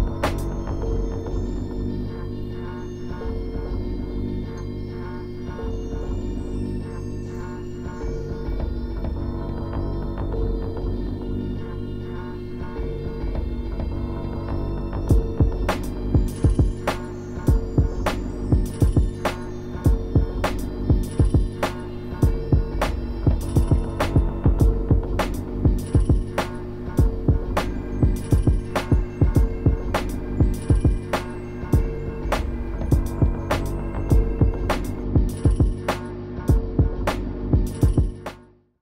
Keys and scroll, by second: 12.9 scroll up 1, 14.1 scroll down 1, 15.4 scroll down 1, 16.6 scroll up 1, 16.7 scroll down 1, 18.3 scroll down 1, 18.5 scroll up 1, 19.3-19.6 scroll down 2, 19.7 scroll up 1, 20.4 scroll up 1, 21.3 scroll down 1, 21.8-22.3 scroll up 2, 23.0 scroll down 1, 23.6 scroll up 1, 24.8 scroll down 1, 26.3 scroll up 1, 26.3 scroll down 1, 26.6 scroll up 1, 27.7-28.2 scroll down 2, 29.0 scroll up 1, 29.1 scroll down 1, 29.2 scroll up 1, 29.8 ctrl++.